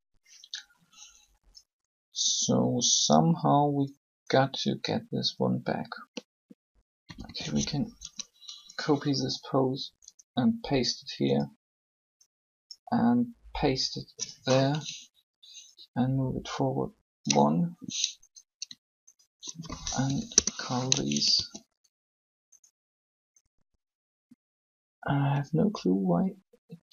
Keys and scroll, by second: 7.0 a, 7.1 a, 19.9 shift+Delete, 20.1 Return, 21.3 alt+a.